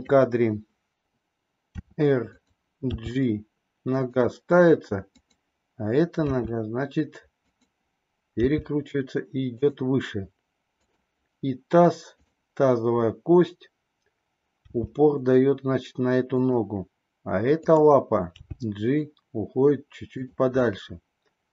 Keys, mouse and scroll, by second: 1.7 r, 2.8 g, 5.1 click, 6.2 r, 8.4 g, 10.7 click, 12.0 click, 14.5 g, 18.3 g, 20.5 scroll up 1, 20.6-21.5 middle drag.